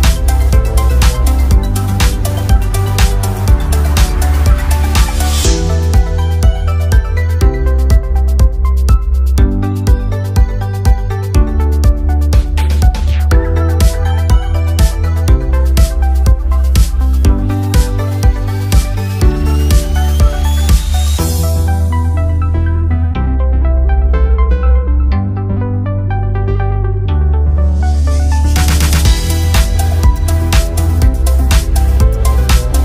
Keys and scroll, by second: 5.2 ctrl+a.